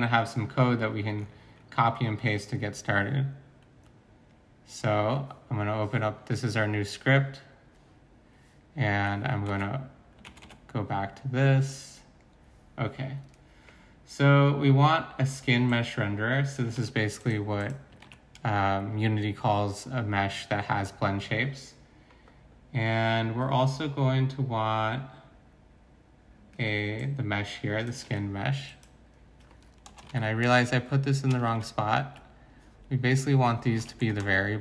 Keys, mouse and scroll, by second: 9.5 alt+Tab, 10.2 alt+Tab, 10.4 alt+Tab, 16.7 ctrl+c, 18.0 ctrl+v, 28.0 ctrl+c, 29.9 Return, 30.1 ctrl+v, 31.5 ctrl+c, 31.6 ctrl+x, 33.8 ctrl+v, 34.2 Return.